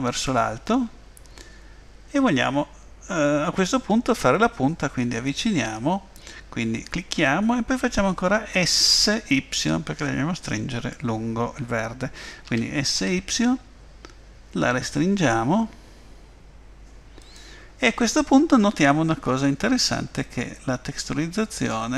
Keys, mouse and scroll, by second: 12.5 s, 19.1-19.8 scroll up 3, 20.2 middle click.